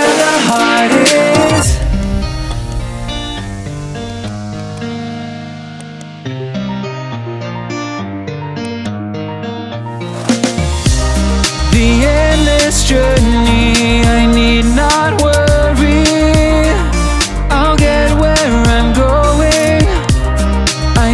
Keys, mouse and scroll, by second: 0.0 3, 0.5 right click, 1.1 right click, 1.8 right click, 2.5 right click, 4.1-5.8 drag, 5.8 right click, 8.6 right click, 10.3 shift+d, 11.8-14.7 drag, 16.4 s, 19.8 right click.